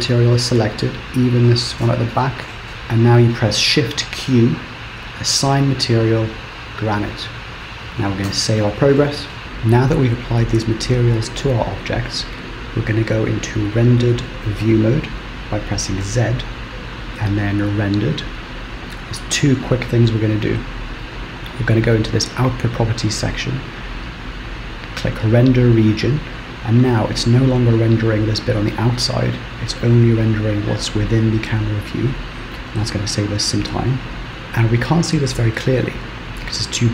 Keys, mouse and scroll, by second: 0.1 shift+click, 2.7 shift+click, 4.2 shift+q, 8.4 ctrl+s, 16.3 z, 22.5 click, 25.3 click, 34.3 Right, 34.3 click.